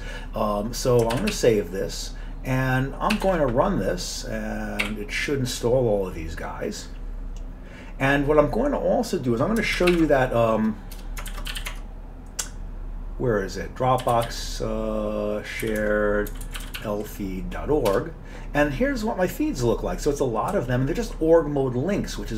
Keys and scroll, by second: 1.2 ctrl+x, 1.3 ctrl+s, 3.2 ctrl+c, 3.3 ctrl+c, 4.9 y, 9.8 ctrl+x, 9.9 ctrl+f, 11.0-12.1 typing, 13.8-17.3 typing, 15.8 Tab, 18.0 Return, 20.5 Down, 21.1 Down.